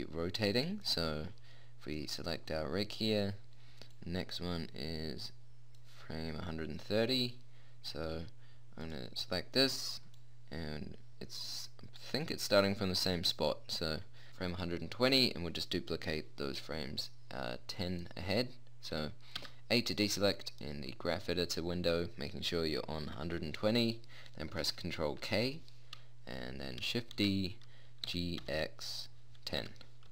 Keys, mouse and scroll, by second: 6.8-9.2 middle drag, 12.2-14.2 middle drag, 19.7 a, 25.6 ctrl+k, 27.5 shift+d.